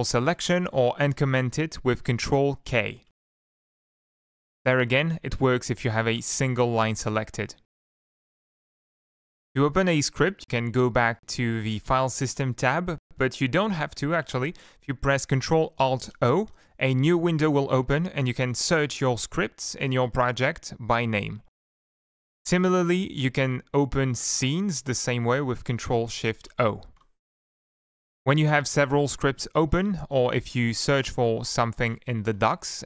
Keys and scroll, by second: 0.2 ctrl+k, 1.4 ctrl+k, 2.4 ctrl+k, 2.9 ctrl+k, 3.5 ctrl+k, 4.1 ctrl+k, 4.6 ctrl+k, 5.6 ctrl+k, 10.7 shift+F11, 14.8 shift+F11, 16.7 ctrl+alt+o, 22.2 typing, 26.6 ctrl+shift+o, 27.6 F1, 27.8 F3, 31.4 End, 31.7 ctrl+shift+Left, 32.2 shift+F1.